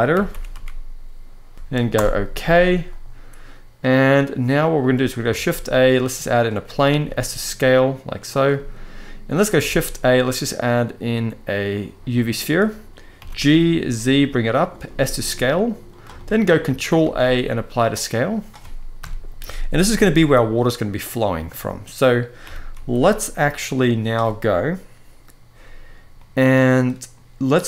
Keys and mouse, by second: 4.5-4.9 middle drag, 5.0 shift+a, 6.7 s, 8.0 click, 8.3 middle click, 9.4 shift+a, 12.9 g, 13.3 z, 14.6 s, 15.7 click, 15.9 shift+middle drag, 16.8 ctrl+a, 18.7 KP_1, 19.6 g, 19.9 z, 21.2-21.7 middle drag, 22.1 g, 22.5 z, 23.2 click, 25.9-26.8 middle drag, 27.4 click.